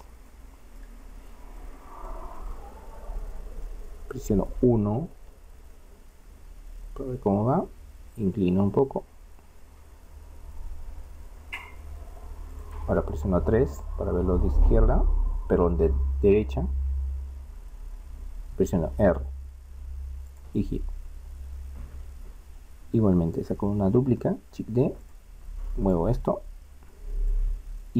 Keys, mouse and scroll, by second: 0.5-4.1 middle drag, 5.5 KP_1, 6.3-8.5 scroll up 1, 10.8 r, 13.5 KP_3, 18.0 r, 20.9 middle click, 24.1 shift+d.